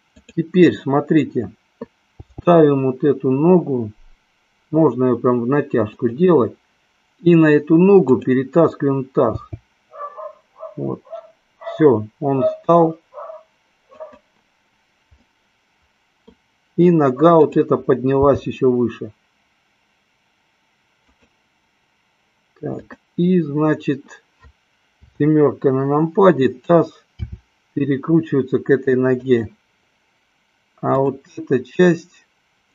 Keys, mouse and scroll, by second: 0.0 click, 2.5 g, 6.4 click, 8.0 click, 9.7 g, 14.4 click, 15.4 middle click, 18.9 g, 21.4 drag, 22.8 click, 25.2 KP_7, 27.2 r.